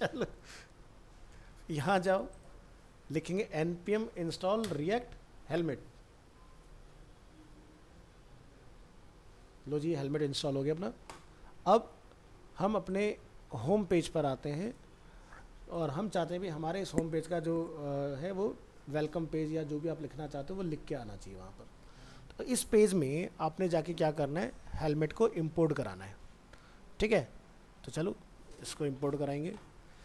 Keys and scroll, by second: 0.1 ctrl+c, 12.0 ctrl+s, 12.3 ctrl+w, 13.3 ctrl+s, 13.5 ctrl+w, 21.9 alt+Tab.